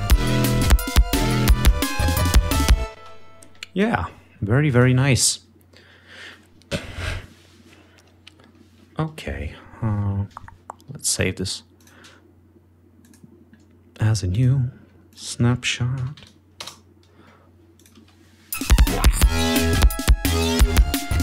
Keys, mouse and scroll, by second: 3.2 ctrl+space, 4.8 click, 8.6 ctrl+scroll down 2, 11.9 click, 13.2 click, 14.4 click, 15.2 click, 16.2 BackSpace, 16.7 Return.